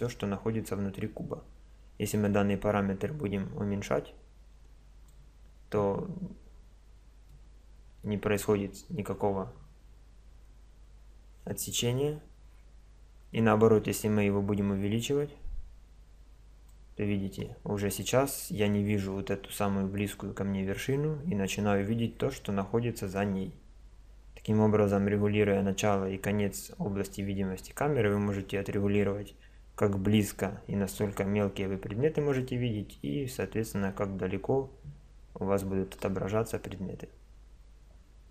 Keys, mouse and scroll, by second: 2.1-4.4 drag, 6.4-11.5 middle drag, 13.3 click, 30.9 click, 33.0-38.3 middle drag.